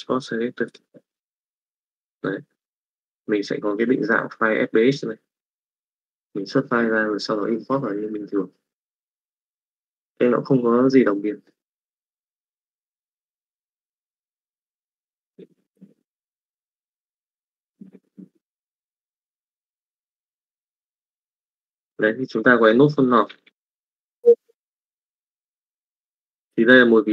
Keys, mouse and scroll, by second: 23.1 click, 23.8 middle click, 24.6 x, 25.3 click, 26.9 middle click.